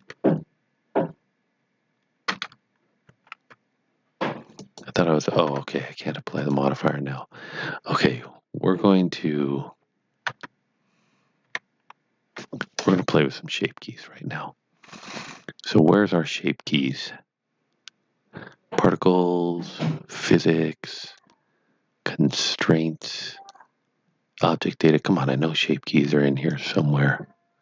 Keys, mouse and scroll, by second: 3.0 ctrl+z, 4.5 click, 5.5 Tab, 6.3 click, 10.2 Tab, 11.4 a, 26.4 a, 26.5 click.